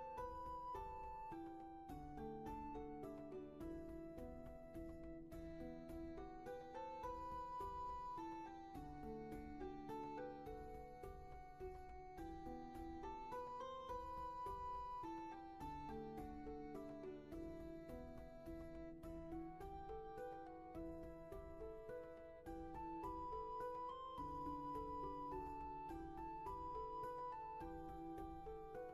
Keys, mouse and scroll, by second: 0.6 ctrl+z, 6.9 ctrl+z, 23.4 ctrl+z.